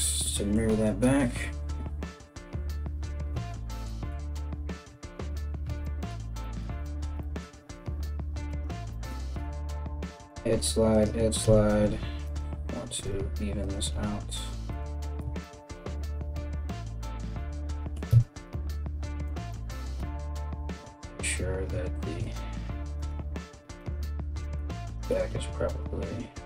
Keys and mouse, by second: 4.4 KP_1, 8.1 alt+right click, 9.0 g, 9.7 g, 11.0 KP_1, 11.9 alt+right click, 12.0-18.8 alt+middle drag, 12.6 g, 13.4 g, 14.8 Tab, 17.7 Tab, 18.8 click, 19.5 g, 22.6 click, 22.7 g, 24.4 click, 25.0 g.